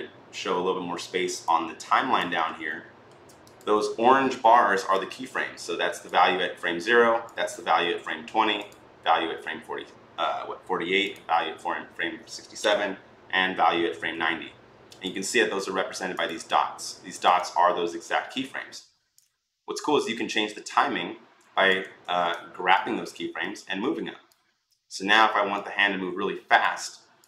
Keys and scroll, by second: 21.8 ctrl+z.